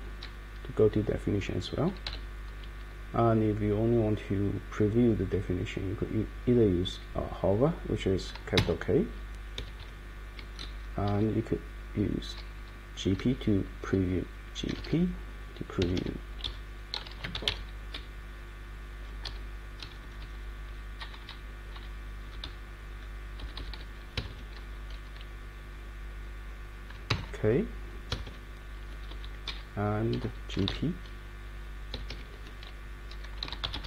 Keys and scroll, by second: 2.0 ctrl+o, 8.6 shift+k, 9.5 Escape, 9.8 Escape, 10.7 Up, 11.1 Down, 14.4-15.8 typing, 16.4 Up, 16.9-17.8 typing, 17.9 Down, 18.4 Down, 19.0 Down, 19.2 Page_Down, 19.8 Up, 20.4 Up, 20.7 Up, 21.0 Down, 21.7 Down, 22.2 Up, 22.9 Up, 23.4 Left, 24.1 Escape, 27.1 shift+k, 28.1 Escape, 29.1 Up, 29.4 Down, 30.2-31.1 typing, 31.9 Escape, 32.0 Escape, 33.2-33.8 typing.